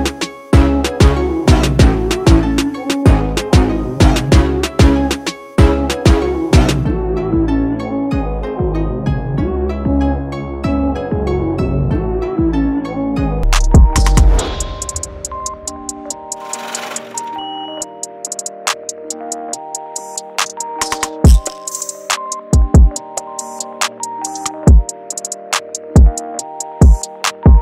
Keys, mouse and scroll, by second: 0.3 click, 7.5 click, 11.5 click, 11.5 typing, 20.4 typing, 24.5 typing.